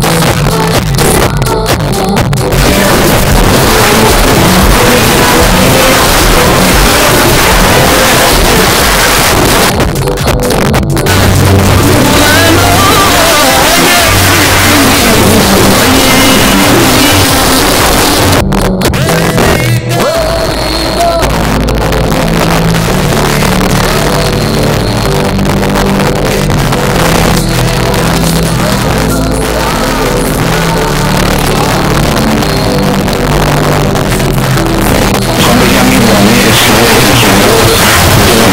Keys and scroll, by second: 8.6 Page_Down, 17.3 Page_Down.